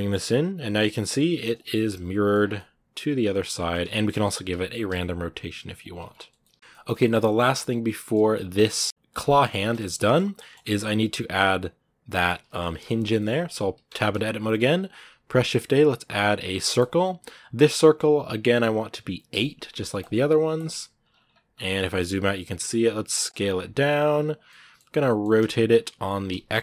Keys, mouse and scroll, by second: 1.5 middle click, 2.1 scroll down 2, 2.4-3.6 middle drag, 3.6 Tab, 3.9 middle click, 4.3 r, 5.9 scroll down 1, 6.2-8.0 middle drag, 8.0-8.7 scroll down 2, 8.1 middle click, 8.7 middle click, 8.8 scroll up 2, 9.0 scroll down 1, 9.1 middle click, 9.3 scroll up 1, 9.6-13.7 middle drag, 13.7 Tab, 19.8-20.9 drag, 20.9 scroll down 1, 21.4 scroll down 9, 22.4 s, 23.3 scroll up 2, 23.6 s, 24.3 middle click, 25.1 r.